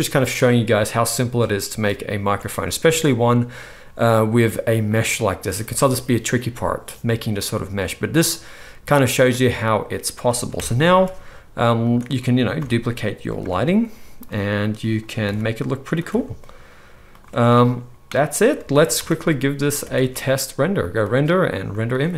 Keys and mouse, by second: 2.8 alt+a, 10.5 KP_0, 10.7-11.1 ctrl+middle drag, 10.8 ctrl+s, 11.8 click, 12.5 shift+d, 13.4-15.2 drag, 13.4 r, 15.2 shift+d, 16.0-19.4 drag, 16.0 r, 18.5 ctrl+s, 18.7 ctrl+s, 18.9 z, 19.8 ctrl+s, 19.9 ctrl+s, 19.9 ctrl+click, 20.8-22.1 middle drag, 21.9 click, 21.9 right click.